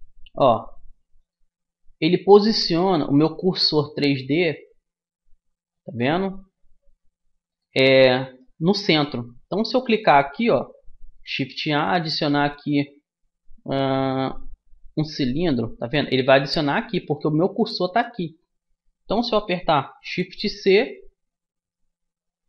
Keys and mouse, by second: 1.6-3.4 drag, 3.9-6.7 middle drag, 7.9-9.7 drag, 9.7-11.5 middle drag, 11.5 shift+a, 16.7-18.5 drag, 18.5 middle click, 20.9 shift+c, 21.0-22.4 middle drag.